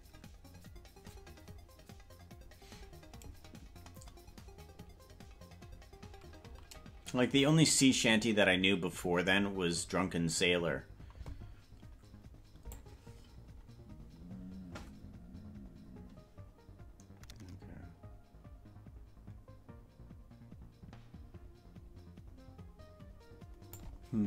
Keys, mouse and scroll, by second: 12.8-20.2 drag, 23.4 click.